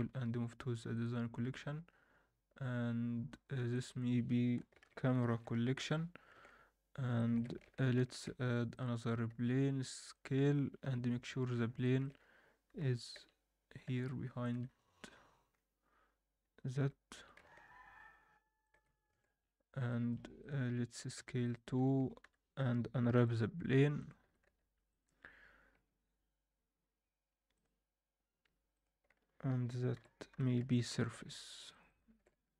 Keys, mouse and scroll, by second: 0.0 m, 3.7-6.2 drag, 6.3 alt+a, 7.2 alt+shift+middle click, 7.6 shift+c, 8.0 shift+a, 9.2 s, 10.4-10.7 scroll down 1, 10.8 KP_1, 11.2-12.3 scroll up 5, 11.8 shift+middle drag, 12.7 g, 14.6-15.5 scroll down 2, 15.1-15.5 scroll up 1, 15.8-16.2 scroll up 4, 16.7-17.3 scroll up 1, 16.7 g, 18.8-19.5 scroll down 3, 19.1 alt+a, 19.9 alt+middle click, 20.4 click, 20.9 s, 21.6-22.0 scroll down 2, 22.0 Tab, 22.2 KP_7, 22.7-24.2 scroll down 2, 23.1 u, 24.2 s, 25.7 Tab, 26.0 scroll up 1, 27.2 scroll up 1, 27.5-32.5 drag.